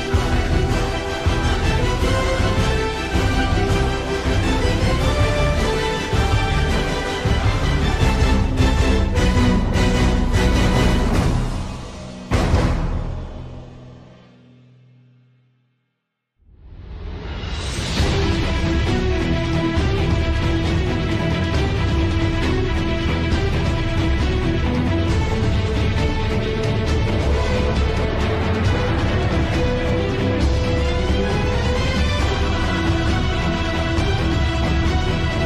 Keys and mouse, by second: 4.7 click, 6.4-7.4 middle drag, 9.6 KP_7, 16.3 click, 16.8 click, 18.9 ctrl+alt+KP_0, 22.5 middle click, 23.6 middle click, 24.9 KP_1, 28.1 middle click, 30.3 KP_1, 31.2 click, 35.0 shift+middle click.